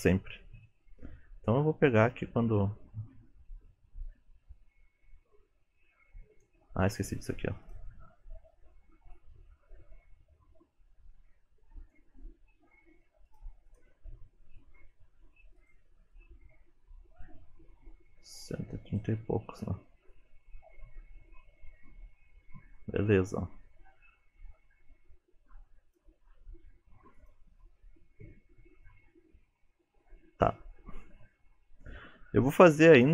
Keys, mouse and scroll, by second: 0.7 space, 1.5 click, 7.6 click, 9.2 click, 13.3 click, 13.7 click, 15.6 click, 16.1 click, 20.1 click, 27.2 click, 28.9 click.